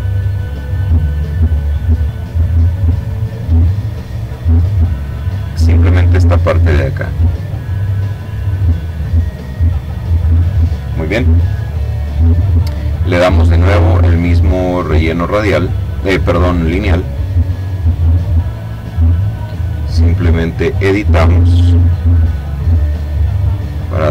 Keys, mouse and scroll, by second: 0.6 click, 2.5-3.8 drag, 3.8 click, 4.6 click, 6.0-7.2 drag, 7.5 click, 8.1 click, 8.9 click, 13.5 click, 14.8 click, 16.2-18.6 drag, 20.1 click, 21.5-23.1 drag, 23.3-24.1 drag.